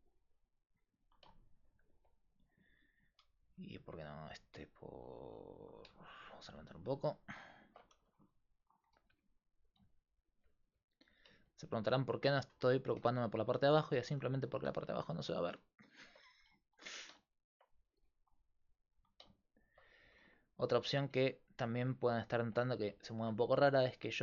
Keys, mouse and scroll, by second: 2.7 alt+right click, 3.5 g, 3.9 click, 8.0 g, 9.1 r, 10.7 r, 12.5 g, 14.3 g, 16.3 g, 17.9 r, 20.0 g, 23.6 g.